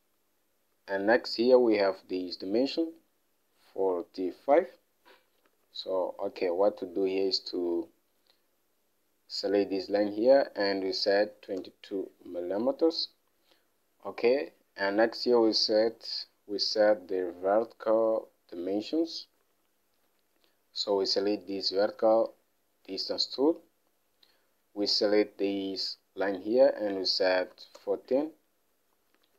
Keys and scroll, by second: 5.9 alt+Tab, 11.5 typing, 12.0 Return, 17.1 alt+Tab, 19.9 alt+Tab, 27.5-28.4 typing.